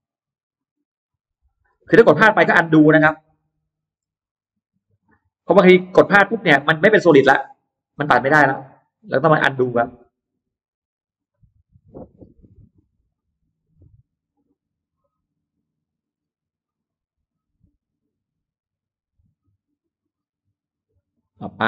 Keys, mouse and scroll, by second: 0.4 click, 1.1 click, 1.4-1.8 scroll down 1, 1.8-2.1 scroll up 1, 2.2 click, 2.8 click, 3.1-3.4 scroll down 3, 3.6-4.8 scroll up 2, 4.8 click, 5.7 click, 6.8 click, 7.4 click, 7.7-8.0 scroll down 2, 8.2-8.6 scroll up 2, 8.7 click, 9.2 click, 9.6-10.2 scroll down 2, 10.2-10.6 scroll up 1, 11.0 click, 11.7 click, 12.0-12.3 scroll down 1, 12.4-12.8 scroll up 1, 13.3 click, 14.2 click, 15.7 click, 16.0-16.3 scroll down 1, 16.4-17.2 scroll up 2, 19.2 click, 19.9 click, 20.5 click, 21.2 click.